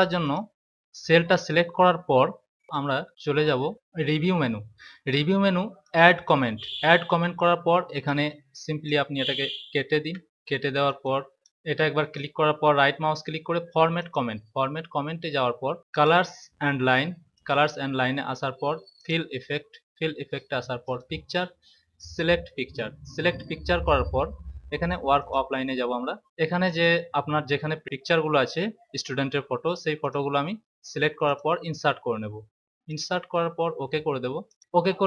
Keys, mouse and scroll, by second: 0.2 click, 2.6 click, 5.8 click, 8.0 click, 9.9 Delete, 10.8 click, 26.6 click, 29.9 click, 31.2 click, 34.4 click.